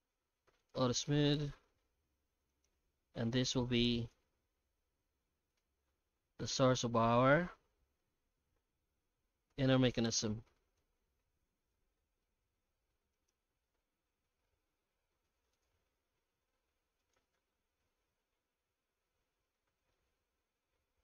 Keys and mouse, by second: 1.7 Tab, 2.4 3, 2.5 right click, 3.3 i, 4.2 alt+s, 5.6 Tab, 6.1-8.0 middle drag, 9.0 alt+h, 9.5 alt+a, 10.0 right click, 10.8 h, 11.0-11.7 alt+middle drag, 12.0 middle drag, 13.1 Tab, 13.1 right click, 13.4 Tab, 15.0 i, 15.9 e, 17.2 Tab, 17.5-19.5 middle drag, 19.8 shift+middle click.